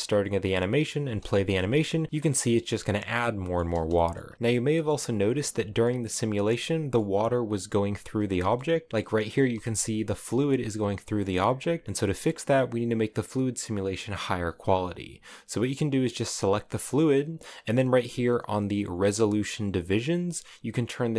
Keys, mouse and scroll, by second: 0.7 space, 1.3 scroll down 1, 1.5-2.5 middle drag, 2.5 scroll down 1, 2.7 middle click, 3.4 space, 3.7 middle click, 3.9 space, 4.3 middle click, 4.8-5.2 scroll up 1, 5.2 middle click, 5.6-6.0 scroll down 1, 6.1-8.5 middle drag, 8.5 right click, 8.9 middle click, 9.1 space, 9.7 middle click, 10.0-10.7 scroll up 1, 10.8 scroll down 3, 10.9 middle click, 11.2 space, 11.8 middle click, 12.0 space, 15.3 right click, 17.9 right click, 18.4-21.1 drag.